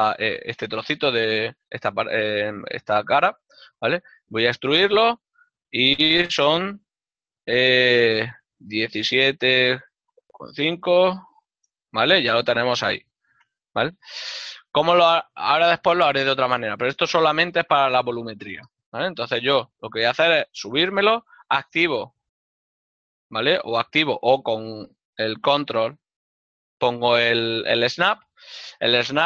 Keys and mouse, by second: 8.5 KP_Decimal, 10.8 KP_5, 11.6 KP_Enter, 15.6 l, 19.1 d, 25.0 g.